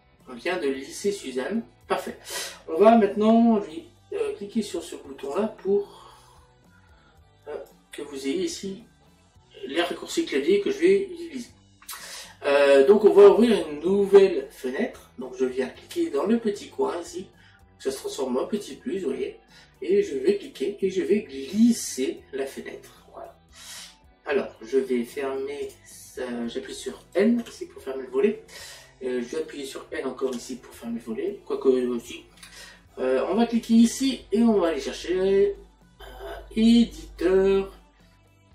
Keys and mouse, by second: 20.5 click, 33.8 click.